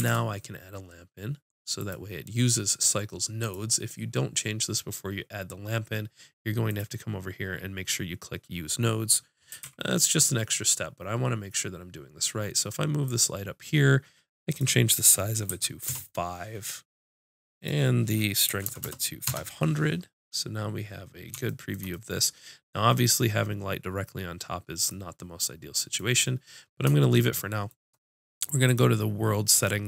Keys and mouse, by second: 0.0 shift+a, 6.6-8.8 drag, 9.6 g, 13.1-16.5 drag, 17.5-18.9 drag, 18.8 KP_0, 24.9-26.7 middle drag, 26.7 click, 26.7 right click, 27.0 middle click, 28.6-29.8 drag.